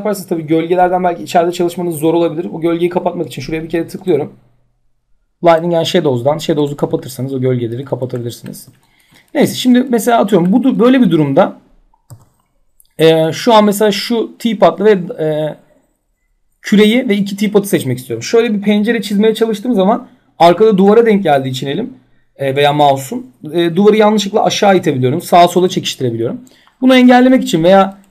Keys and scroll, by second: 11.7 w, 25.2 ctrl+z.